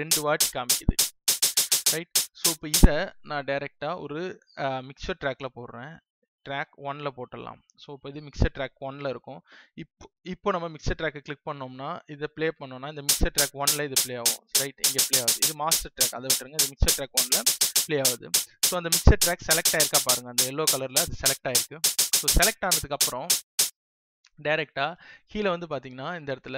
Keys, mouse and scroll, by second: 3.4 click, 23.6 space.